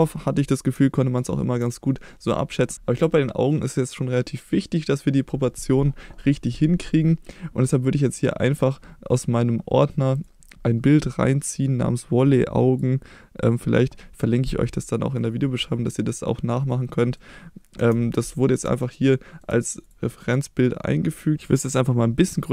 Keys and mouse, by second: 1.0-1.5 shift+middle drag, 16.7 middle click, 17.8 KP_1, 18.8-19.4 shift+middle drag, 19.8 click.